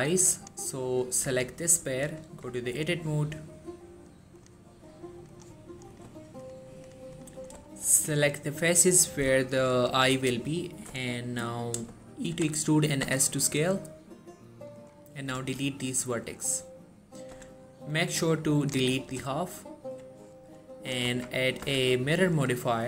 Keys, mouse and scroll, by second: 0.0-0.5 shift+scroll up 2, 0.5 click, 1.3 g, 1.8 right click, 2.3 Tab, 4.5 click, 7.8 shift+middle click, 8.0-9.2 scroll up 1, 9.2 scroll down 1, 9.6 shift+middle click, 12.4-13.2 typing, 14.9 click, 15.5 x, 17.1 scroll down 1, 17.5 z, 18.0-19.0 drag, 19.3-20.1 x, 21.2 Tab, 21.8 z, 22.7 click.